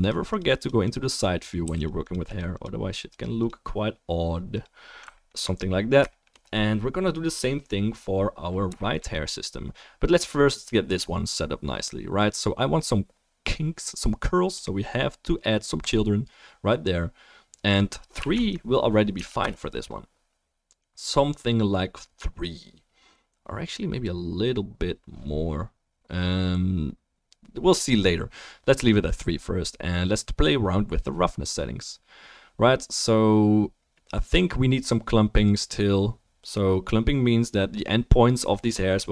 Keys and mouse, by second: 1.6 f, 1.8 drag, 5.2 alt+click, 5.2 alt+middle click, 5.2 alt+right click, 6.1 shift+click, 6.1 shift+middle click, 6.1 shift+right click, 15.8-17.6 drag.